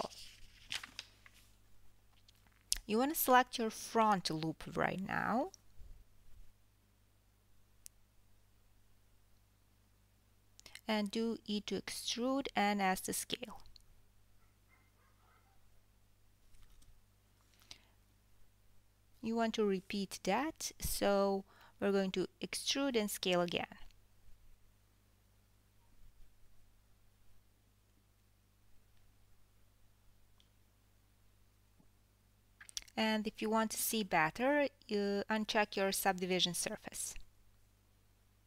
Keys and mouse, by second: 0.2 f, 2.4 KP_1, 9.3 1, 9.9-10.3 alt+drag, 13.5 e, 26.2 e, 27.3 g, 28.4 s, 29.3 s, 33.5 click, 33.6-38.4 middle drag.